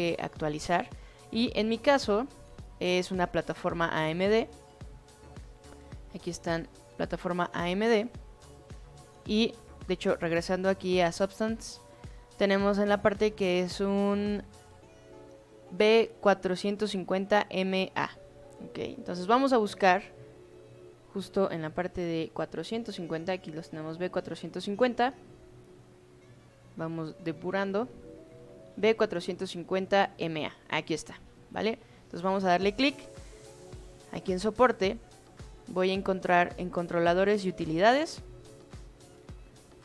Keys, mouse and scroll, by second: 4.5 click, 8.8 click, 9.9 click, 11.6 click, 18.8 click, 20.5-22.9 drag, 24.2 click, 26.4-29.6 drag, 31.7 click, 34.4 click, 37.1 click, 39.1-39.8 drag.